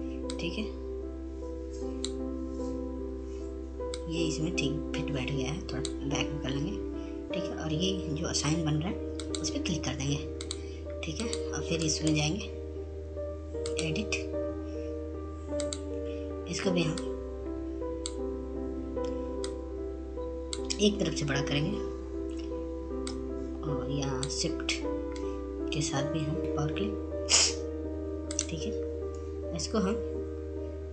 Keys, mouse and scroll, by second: 1.3-5.3 drag, 6.5 click, 9.1-11.1 right drag, 11.1 click, 12.9-19.6 drag, 20.2-24.2 shift+drag, 24.2-26.4 drag, 27.4 right click, 28.4 click.